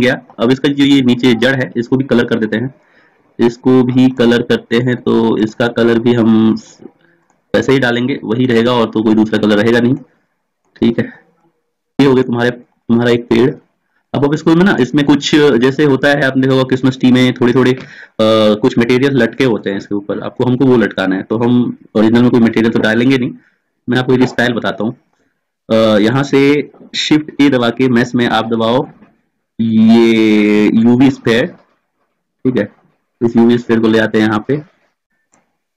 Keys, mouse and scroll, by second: 1.5-12.0 drag, 12.7-19.8 drag, 33.8 click, 35.1-35.7 drag.